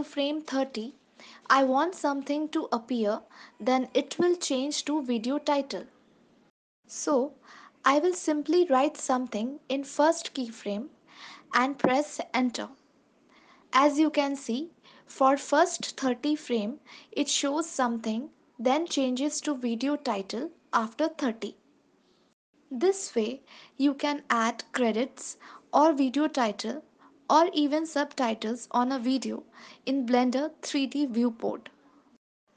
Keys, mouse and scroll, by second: 0.7 space, 2.7 space, 4.0 ctrl+s, 5.2 click, 7.7 click, 13.5 click, 14.0 space, 16.6 space, 17.5 ctrl+s, 24.2 click.